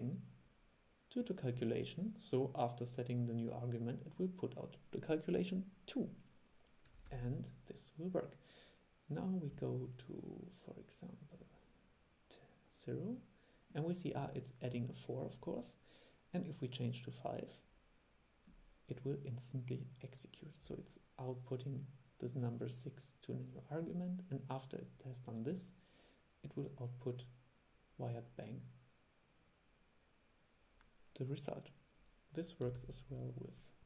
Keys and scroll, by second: 7.2 super+e, 32.9 super+e.